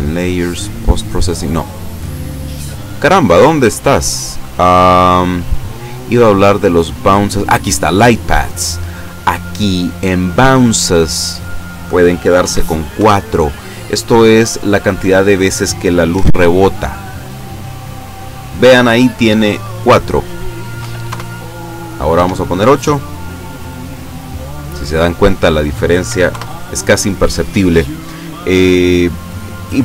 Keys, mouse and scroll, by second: 0.5 click, 1.2 click, 1.6 scroll up 1, 2.7 scroll up 1, 4.8 click, 5.2-5.8 scroll up 2, 8.0 click, 11.1 click, 12.5 KP_4, 13.0 KP_Enter, 16.2 F12, 20.0 click, 20.8 KP_8, 21.1 KP_Enter, 22.2 F12, 25.3 click, 26.1 KP_4, 26.3 KP_Enter.